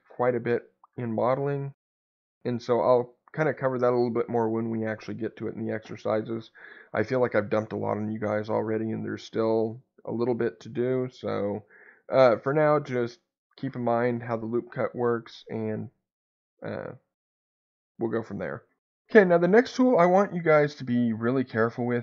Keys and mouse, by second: 2.3 Escape.